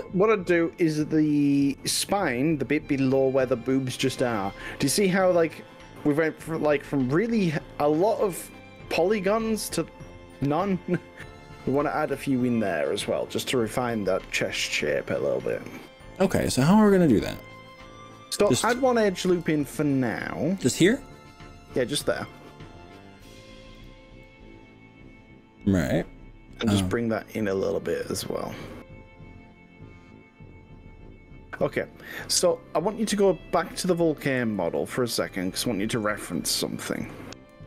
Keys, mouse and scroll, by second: 1.3-7.3 middle drag, 7.7-8.6 scroll up 5, 8.8-13.2 middle drag, 13.2 click, 15.6 scroll up 2, 15.9-16.3 scroll down 3, 16.6 middle click, 19.3 ctrl+r, 23.9 right click, 24.2-25.9 middle drag, 28.5 s, 32.5 click, 33.1 click, 35.3 super+click, 36.2 click, 37.1 alt+click.